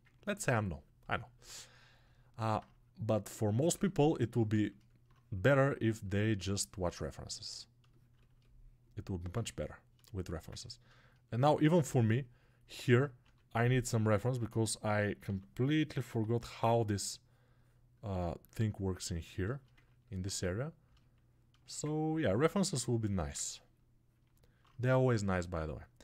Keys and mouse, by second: 10.8-13.4 alt+shift+right drag, 13.4-16.1 ctrl+drag, 16.1 alt+right click, 16.5-19.6 drag, 19.4 shift+right click, 19.6 ctrl+alt+right click, 19.7-22.6 ctrl+drag, 22.6-24.1 ctrl+right drag, 24.1-26.0 alt+drag.